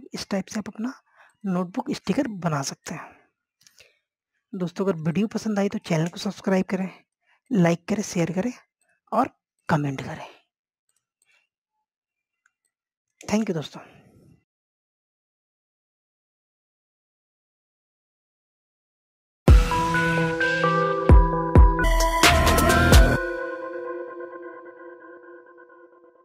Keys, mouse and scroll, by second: 3.3 scroll down 1, 4.4-7.6 drag, 7.5 right click, 8.1 click, 11.4 scroll down 1, 12.0 click.